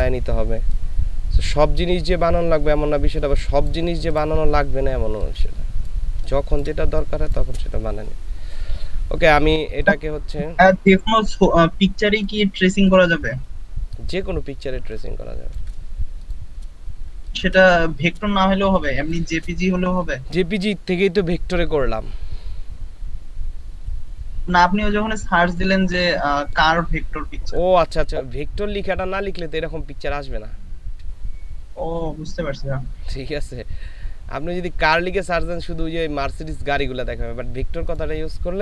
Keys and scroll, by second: 5.3 space, 6.1 ctrl+space, 14.5 ctrl+space, 17.0 ctrl+space, 18.6 ctrl+alt+space.